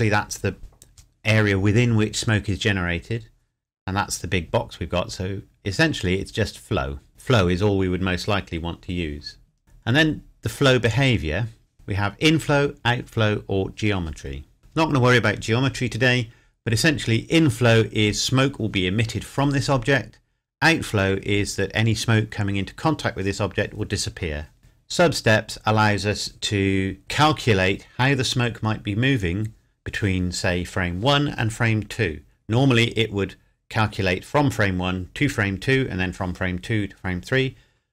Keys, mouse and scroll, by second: 7.1 click, 10.8 click, 24.6 click.